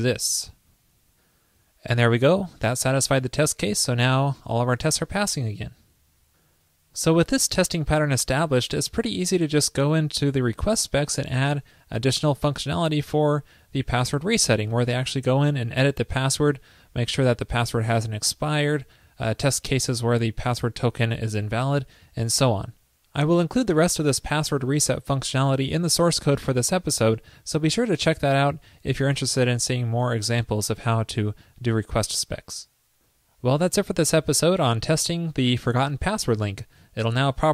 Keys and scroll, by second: 0.5 super+s.